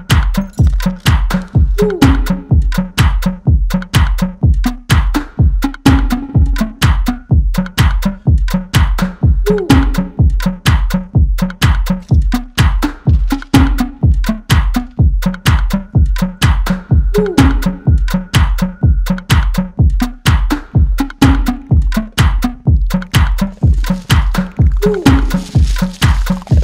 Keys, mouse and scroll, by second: 2.0-5.3 drag, 5.3 typing, 6.9 ctrl+z, 8.0-8.8 drag, 11.1 click, 16.7 click, 18.4 typing, 18.6 click, 22.8-24.2 [, 24.2 right click, 24.9 click, 25.2 [, 26.3 click.